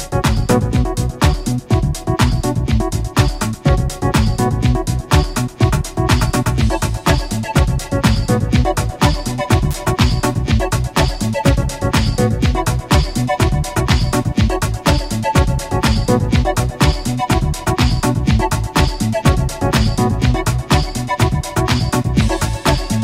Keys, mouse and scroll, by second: 0.7 shift+click, 2.7-3.3 shift+scroll up 2, 3.4 middle click, 4.1 click, 5.1 click, 5.6-5.9 scroll down 1, 6.1 middle click, 7.3 scroll down 1, 7.7 middle click, 8.3 a, 8.5 b, 8.7-9.3 drag, 10.1 g, 11.3 click, 11.9 shift+middle click, 12.6 shift+scroll up 1, 13.2-13.9 shift+middle drag, 15.6 shift+a, 16.5 shift+click, 17.0 shift+click, 17.5-18.1 shift+scroll up 2, 18.3 shift+middle click, 19.1-20.2 shift+middle drag, 20.5 shift+click, 22.3 shift+scroll down 1, 22.9-23.0 shift+middle drag.